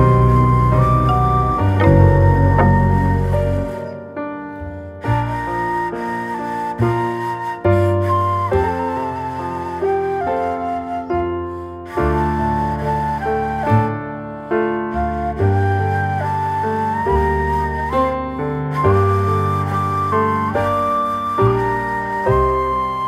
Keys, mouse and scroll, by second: 0.6 scroll down 2, 1.1-1.7 shift+middle drag, 1.7 g, 2.7-3.2 middle drag, 3.2 scroll up 3, 3.5-5.5 shift+middle drag, 5.5 g, 6.9 Tab, 8.0 ctrl+r, 11.1 click, 11.7 s, 14.2 ctrl+b, 19.2 alt+middle click, 20.4 click, 21.7 s.